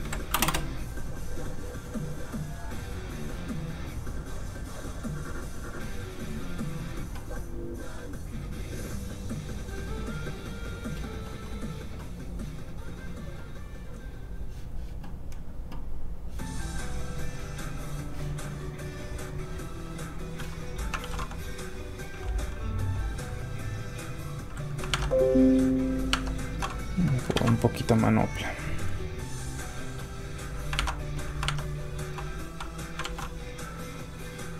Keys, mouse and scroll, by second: 0.0-0.3 typing, 0.4 Return, 3.9-4.6 scroll down 1, 14.0 click, 14.8 scroll up 1, 15.0-15.9 scroll down 1, 17.3 click, 18.4 scroll up 1, 19.6 click, 20.9 shift+super+s, 23.8 super+click, 23.9 click, 24.9 alt+Tab, 25.8 alt+click, 26.1 alt+Tab, 26.4 alt+click, 26.9 scroll down 1, 27.0 middle click, 27.3 ctrl+v, 27.8 click, 27.9 click, 28.5-28.9 scroll up 1, 28.9 click, 30.7 alt+Tab, 31.9 alt+click, 32.9 shift+click, 33.0 shift+super+s.